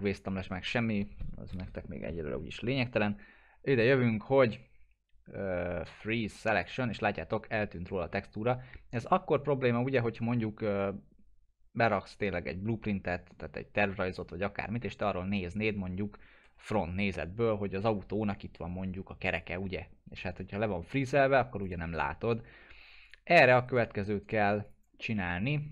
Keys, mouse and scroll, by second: 6.5 click, 7.1-8.3 alt+middle drag, 16.2-17.2 typing, 17.5 middle click, 18.2-19.4 drag, 20.3-20.9 scroll down 1, 21.6 click, 21.9 right click, 23.0 click, 23.6 right click, 24.6 click, 25.0 alt+middle click.